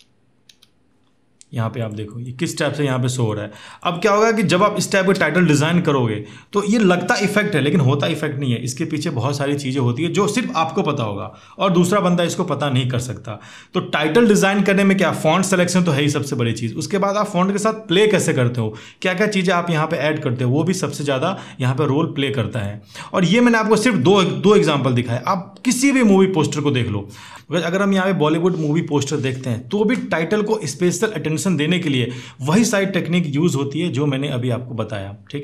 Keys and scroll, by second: 0.3 Up, 4.4 space, 24.4 Delete.